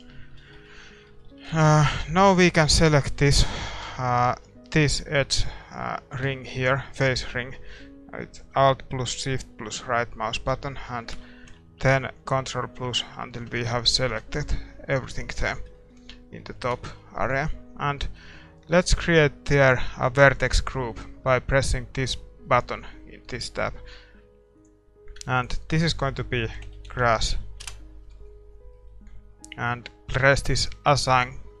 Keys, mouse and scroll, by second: 0.5 shift+z, 0.7-11.1 middle drag, 1.3 a, 1.8 ctrl+s, 2.2-6.3 right drag, 3.0 Tab, 3.8 a, 5.7 click, 11.1 ctrl+KP_Add, 11.5 ctrl+KP_Add, 11.8 ctrl+KP_Add, 12.4 ctrl+KP_Add, 12.7 ctrl+KP_Add, 13.1 ctrl+KP_Add, 13.5 ctrl+KP_Add, 14.0 ctrl+KP_Add, 14.9-15.4 scroll down 1, 15.4-17.6 middle drag, 24.6-27.6 drag, 27.6 s, 28.7-31.2 middle drag, 31.2-31.6 drag.